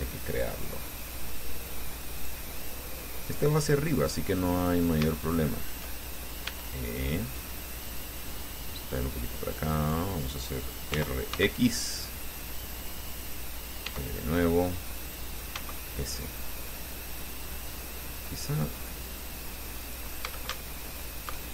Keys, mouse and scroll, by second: 0.5 ctrl+click, 2.4 click, 3.4 click, 4.2 right click, 4.7-6.1 middle drag, 6.7 e, 8.1 click, 9.2-10.3 drag, 11.1 r, 11.6 x, 13.3 click, 14.1 e, 15.6 click, 15.8 s, 17.7 click, 18.1 middle click, 18.7 scroll up 2, 20.1 click, 20.5 a, 21.0 alt+shift+right click.